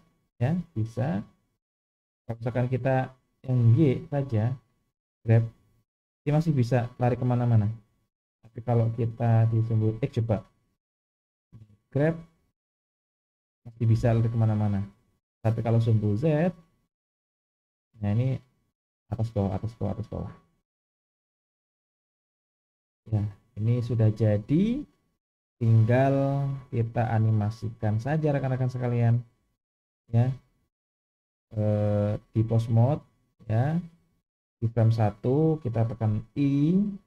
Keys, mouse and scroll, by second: 2.8 click, 3.7 click, 5.3 g, 9.1 click, 10.0 click, 12.2 g, 15.6 click, 16.4 click, 17.3 g, 22.3 n, 22.9-23.5 middle drag, 23.8 scroll down 2, 24.4-24.8 shift+middle drag, 25.0-25.9 scroll up 2, 25.9-26.5 middle drag, 29.1-36.2 drag.